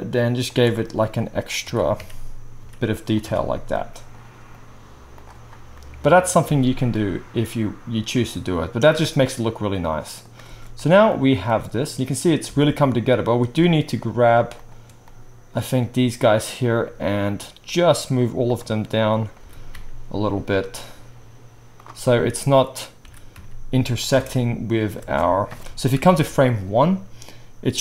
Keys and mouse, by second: 1.6-5.2 right drag, 1.6 e, 3.2 Tab, 5.7-8.8 right drag, 6.7 alt+a, 9.1-13.8 right drag, 10.4 space, 12.5 space, 14.5 shift+middle click, 18.5 shift+middle drag, 19.4 g, 23.0 g, 24.1 space, 24.9 space, 25.9 shift+Left.